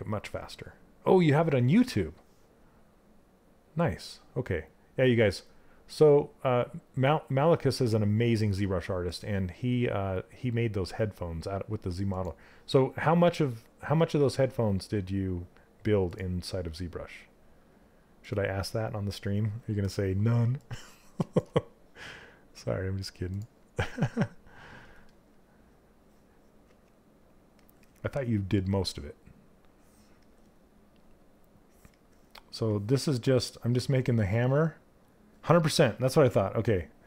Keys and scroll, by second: 26.2 s.